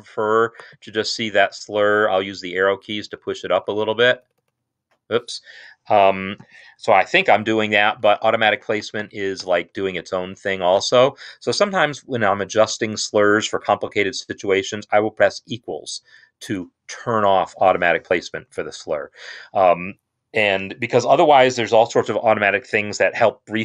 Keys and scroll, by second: 2.4 Up, 2.6 Up, 3.0-3.4 Up, 3.6 Up, 3.8 Up, 4.0 Up, 4.2 Up, 4.2 Up, 4.4 Up, 7.4 Up, 7.7 Up, 7.9 Up, 8.1 Up, 8.3 Up, 8.5 Up, 8.9 Up, 9.3 Up, 9.7 Up, 15.9 =, 18.3 Escape.